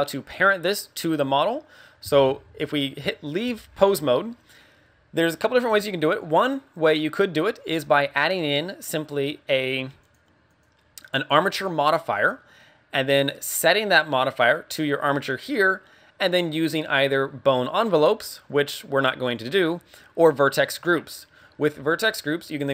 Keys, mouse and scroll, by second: 0.6 middle click, 1.1 scroll up 3, 2.2 ctrl+Tab, 3.2 scroll down 2, 3.8 scroll down 1, 6.1 right click, 7.6 click, 9.3 click, 9.5 click, 10.4 click, 13.1 click, 19.1 click.